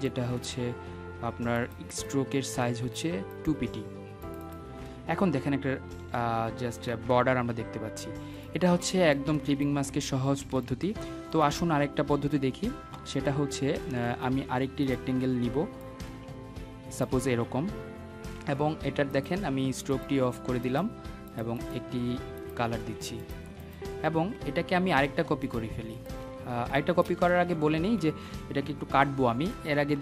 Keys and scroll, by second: 26.5 Escape.